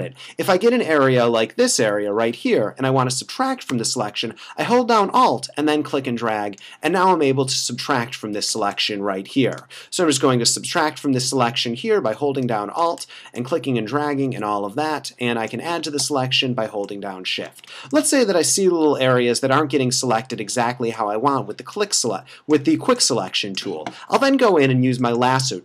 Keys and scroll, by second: 0.9 super+=, 8.6 space, 11.2 space, 17.7 space.